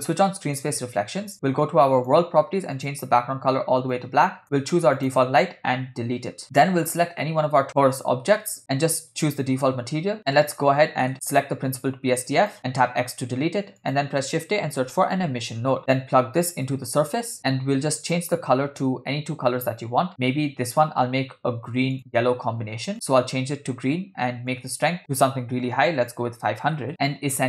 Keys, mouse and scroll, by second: 0.6-2.1 drag, 2.8 click, 5.0 click, 6.2 Delete, 6.8 click, 8.6-9.6 drag, 10.2 middle click, 11.3 click, 12.4 click, 12.9 x, 13.4 shift+a, 15.3 s, 16.7-17.4 drag, 18.1 click, 21.9 click, 24.5-26.8 drag, 26.4 0.